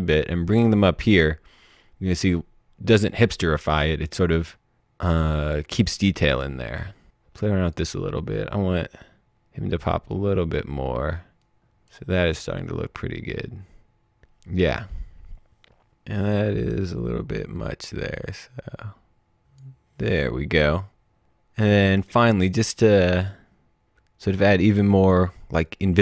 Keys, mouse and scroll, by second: 4.4 click, 15.2 click, 16.2 click, 21.2 click, 25.6 click.